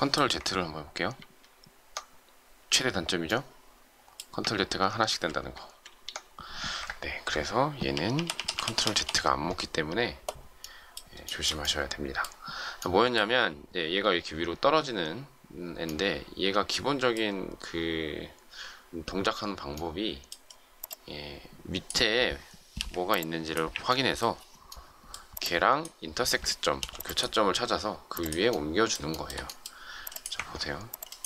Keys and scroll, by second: 1.2 ctrl+z, 4.8 ctrl+z, 7.9 ctrl+y, 22.7 Delete, 23.7 Delete, 26.7 m.